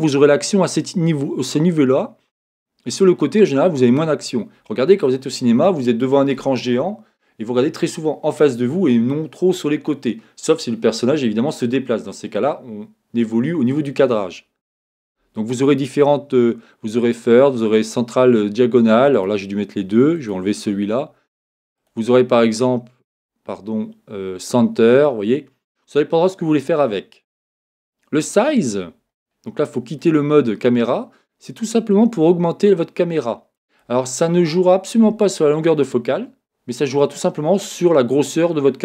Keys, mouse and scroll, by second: 15.7-17.7 drag, 19.1-21.0 drag, 21.7-25.0 drag, 28.7-31.9 middle drag, 31.9-38.8 drag.